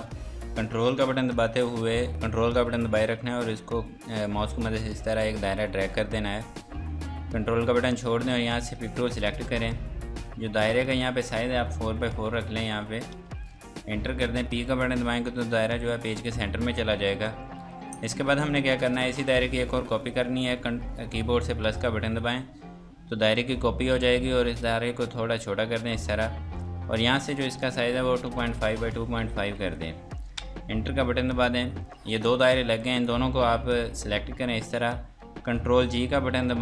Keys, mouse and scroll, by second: 3.4 ctrl+click, 8.9 click, 12.1 KP_4, 12.2 Tab, 12.3 KP_4, 13.1 KP_Enter, 15.3 p, 17.7 F3, 18.1 click, 21.6 KP_Add, 24.4 shift+click, 27.2 click, 28.2-29.4 typing, 28.8 Tab, 30.4 KP_Enter, 32.1 click, 32.5-33.0 scroll down 1, 33.0 click, 36.0 ctrl+g.